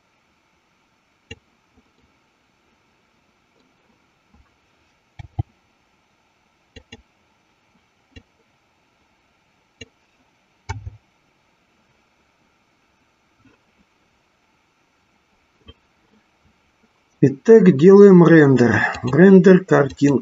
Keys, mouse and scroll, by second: 2.2-4.0 middle drag, 5.7 g, 6.8 click, 8.4-10.0 drag, 10.9 KP_0, 18.9-20.2 drag.